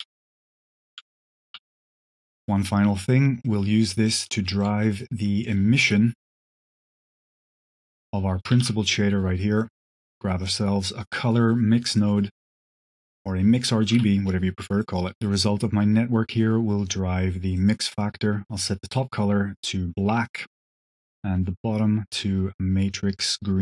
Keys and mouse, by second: 0.2 click, 0.7 shift+click, 1.4 space, 2.1 click, 3.3 click, 4.8 drag, 5.3 click, 5.7 g, 7.2 drag, 7.9 click, 8.6 shift+a, 12.4 click, 13.2 click, 13.9 g, 14.9 click, 15.6-16.2 drag, 16.7-17.5 drag, 17.8 click, 18.5 click, 20.1 drag, 20.5-23.4 drag.